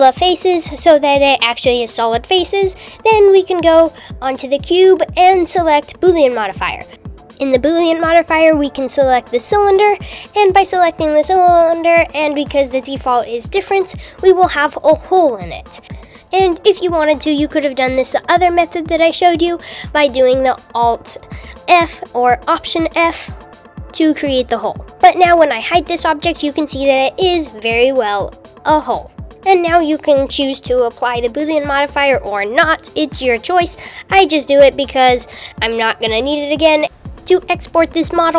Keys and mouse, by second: 0.4 Tab, 6.0 click, 7.2-11.4 drag, 12.9 h, 23.8 click, 24.7 h, 29.2 alt+h, 30.8 click, 33.1 click, 35.8 super+a, 36.8 n, 38.3 click.